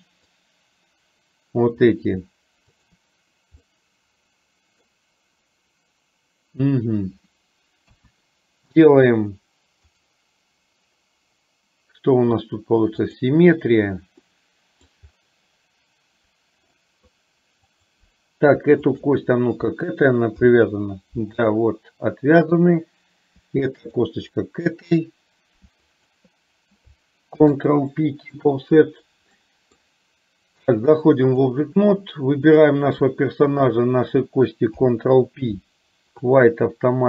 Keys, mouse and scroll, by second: 2.9 shift+click, 3.8-4.9 middle drag, 7.9 KP_1, 11.0-14.3 right drag, 14.3 middle click, 16.8 middle click, 18.9 shift+click, 20.4 ctrl+p, 22.7 click, 23.9 click, 26.0 shift+click, 27.4 ctrl+p, 29.5 middle click, 30.9 click, 32.5 click, 33.5 shift+click, 34.8 ctrl+p.